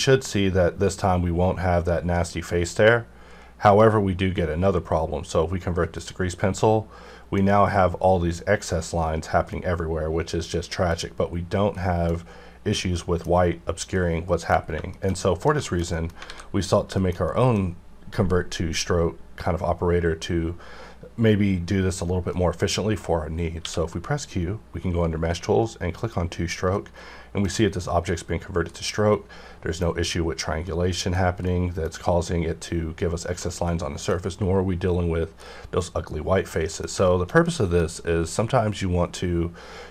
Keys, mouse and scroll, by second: 3.7 click, 5.9 click, 6.6-10.7 middle drag, 10.7-11.8 scroll down 1, 11.8 middle click, 13.7-14.3 middle drag, 14.5 scroll down 1, 14.9 shift+middle click, 15.6 shift+middle click, 16.0 scroll down 1, 16.3 alt+a, 16.6 click, 17.0 shift+middle click, 22.3 middle click, 22.3 middle click, 23.6 q, 26.0 click, 26.7-36.0 middle drag, 35.9 scroll down 1, 37.0-39.9 shift+middle drag.